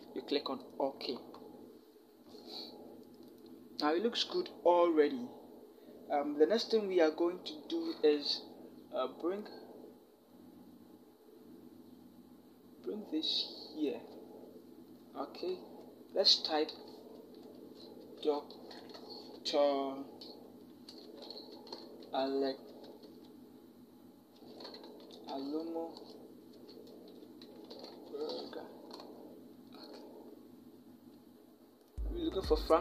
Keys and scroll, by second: 15.4 t, 17.0-18.9 typing, 20.7 Return, 20.8-22.5 typing, 24.2-25.1 typing, 26.3-28.1 typing.